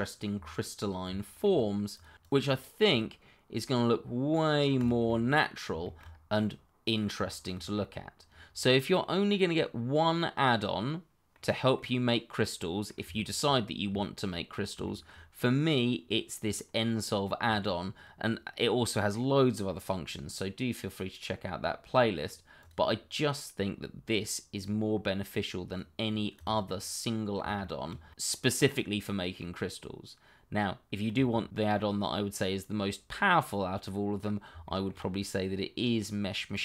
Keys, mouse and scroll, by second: 0.0 scroll down 1, 0.1 middle click, 1.2 shift+middle click, 1.7 middle click, 2.0 click, 5.1 middle click, 6.1 scroll up 1, 6.3 middle click, 7.4 shift+middle click, 10.1 middle click, 13.3 shift+middle click, 14.0 middle click, 14.2 shift+middle click, 14.9 middle click, 15.0 shift+middle click, 18.1-19.3 scroll up 1, 19.6 middle click, 22.6 click, 26.0 middle click, 26.9 shift+middle click, 27.3 middle click, 31.1 shift+middle click, 31.2 middle click, 33.8 shift+middle click, 33.9 middle click, 34.1-35.3 scroll up 1, 35.3 click.